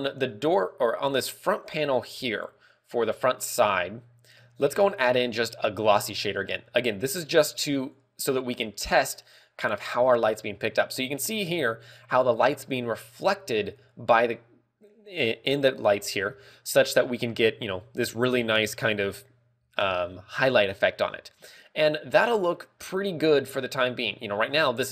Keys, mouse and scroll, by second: 0.5 right click, 2.5 right click, 8.3 click, 11.6 scroll up 3, 16.0-16.7 scroll up 8, 16.6 middle click, 16.7 shift+middle click, 17.7-18.0 scroll down 3, 18.0 scroll up 2, 21.4 scroll down 3, 21.9 middle click, 23.9 scroll down 1, 24.5 scroll down 2.